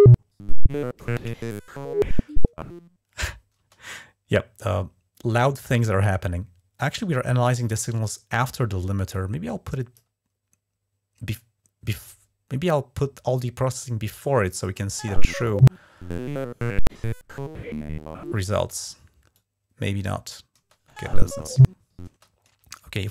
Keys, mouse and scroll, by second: 3.4 space, 9.0 click, 14.4 space, 18.4 space, 19.2 click, 20.4 space, 21.9 space, 22.9-23.1 drag.